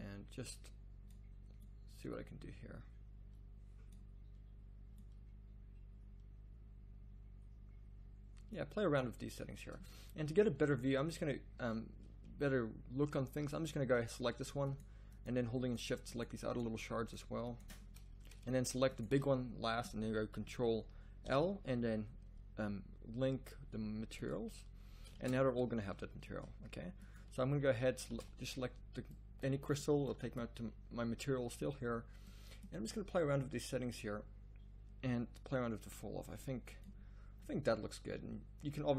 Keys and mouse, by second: 3.0 click, 5.0 click, 6.9-8.1 middle drag, 10.1 z, 10.3 z, 10.7-14.6 middle drag, 12.0 z, 21.2 ctrl+l, 24.8 z, 25.3 shift+z, 27.5 z, 28.3 shift+z.